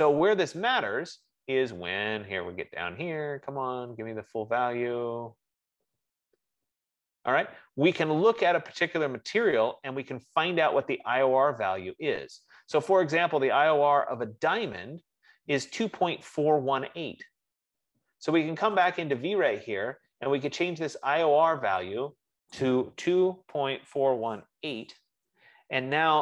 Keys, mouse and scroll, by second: 0.7-2.6 scroll, 2.6-4.8 scroll down 32, 4.8-10.1 middle drag, 4.8-7.5 scroll, 19.5 click, 22.9 click, 23.2-25.2 typing.